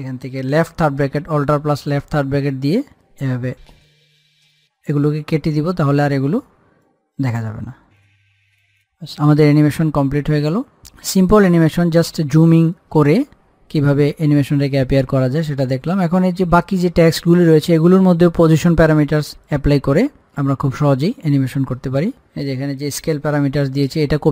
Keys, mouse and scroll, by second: 1.1 alt+Num_Lock, 1.1 click, 1.5 alt+], 3.1-9.0 drag, 10.0 scroll up 1, 11.5 click, 13.6 scroll down 1, 13.8-15.4 scroll up 1, 19.7-22.5 drag.